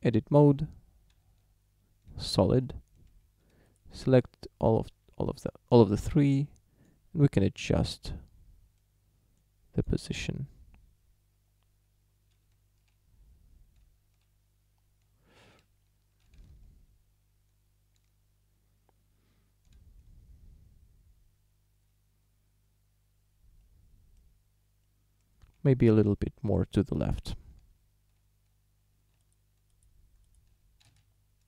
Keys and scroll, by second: 1.3 z, 3.1 a, 12.5 Tab, 16.4 z, 25.6 Tab, 27.5 z, 30.9 z.